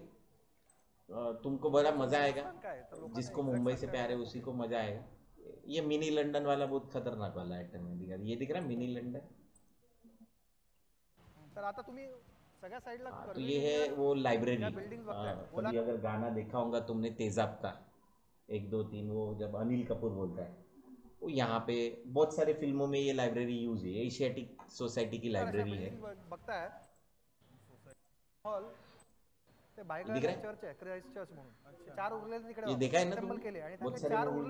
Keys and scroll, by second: 32.8 Left.